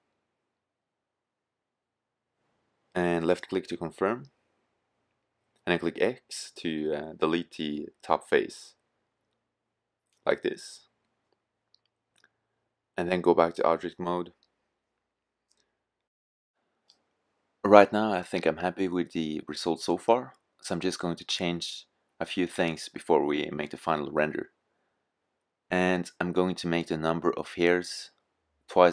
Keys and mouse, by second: 4.9-6.5 drag, 6.7 x, 15.2 KP_0, 23.2-24.7 drag, 24.9-28.4 drag.